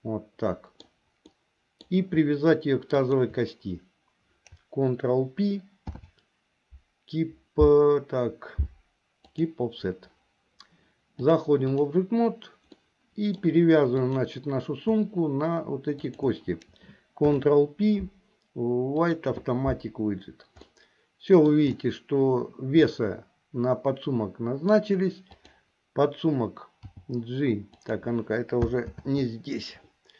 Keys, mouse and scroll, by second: 1.5 middle click, 2.0 scroll down 1, 3.1 shift+click, 5.9 ctrl+p, 11.2 click, 12.9 middle click, 14.2 click, 16.0 shift+click, 17.2 ctrl+p, 20.7 middle click, 22.9-24.9 middle drag, 25.5 click, 27.0 g, 29.2 ctrl+z.